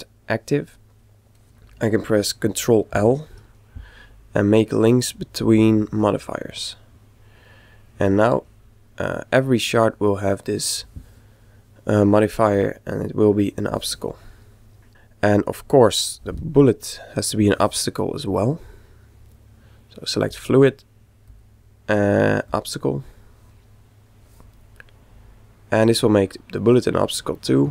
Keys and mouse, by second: 0.8-2.6 middle drag, 2.8 ctrl+l, 8.1-12.2 right drag, 9.4-11.3 middle drag, 12.6 click, 14.3 right click, 14.9 a, 15.3 shift+click, 20.0-23.0 drag, 24.7-26.4 middle drag, 26.9-27.7 middle drag.